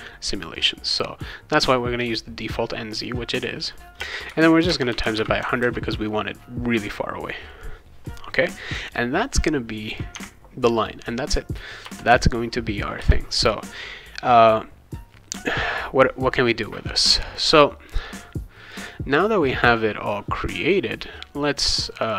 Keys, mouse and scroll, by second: 0.5 click, 4.0-5.7 typing, 9.9 click, 10.1 Tab, 10.8 click, 11.8 Return, 13.0 Return, 17.3-18.7 drag, 22.0 click.